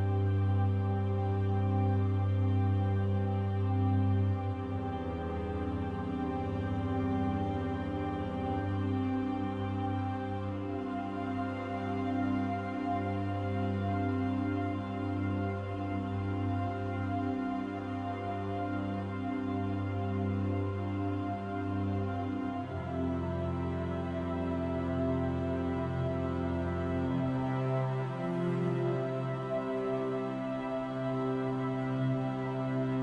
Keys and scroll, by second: 31.2 ctrl+z.